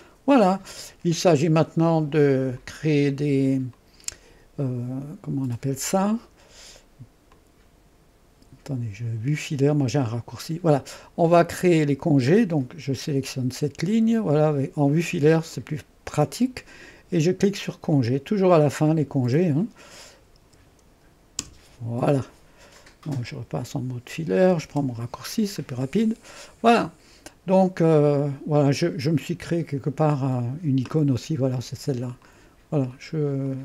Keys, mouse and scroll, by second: 2.6 click, 3.8 click, 7.3 click, 10.3 click, 11.6-13.2 scroll up 2, 13.2 click, 15.2 ▭, 15.6 click, 17.9 click, 20.4-21.4 typing, 24.7 shift+7, 25.8 click, 26.8 right click, 26.9-28.9 drag, 27.0-28.1 right drag, 31.5 click, 32.9 click, 33.5 click.